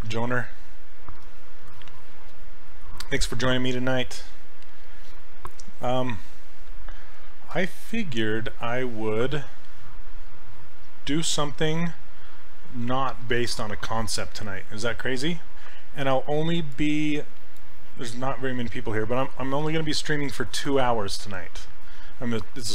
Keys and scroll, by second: 3.6 s, 16.7 s.